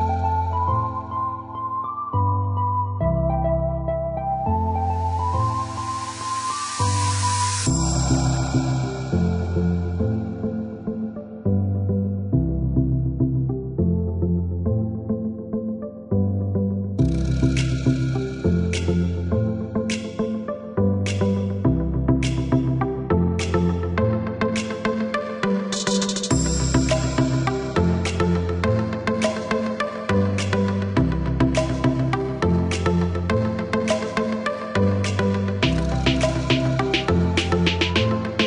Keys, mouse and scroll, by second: 1.0 ctrl+click, 1.8 ctrl+click, 3.3 click, 4.9 click, 8.9 click, 13.6 click, 15.2 click, 16.2 KP_3, 16.5 KP_8, 16.8 KP_Enter, 17.4 KP_Enter, 18.4 click, 22.5 click, 23.8 middle click, 25.6 click, 27.6 KP_7, 27.9 KP_0, 28.1 KP_Enter, 29.4 Escape, 30.5 click, 33.1 click, 34.2 click, 34.9 space, 35.7 click, 36.3 click.